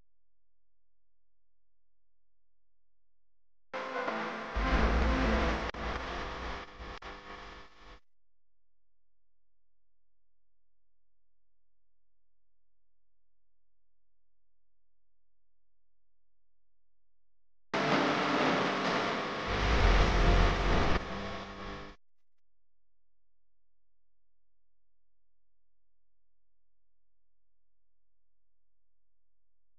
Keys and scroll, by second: 0.0-1.3 typing, 7.0-7.6 typing, 10.6-11.3 typing, 16.3 r, 22.0 a.